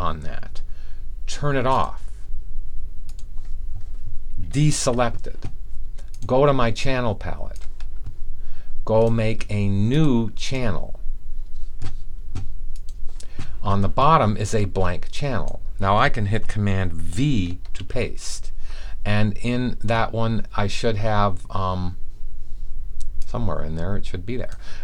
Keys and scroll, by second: 4.6 super+d, 17.7 super+v.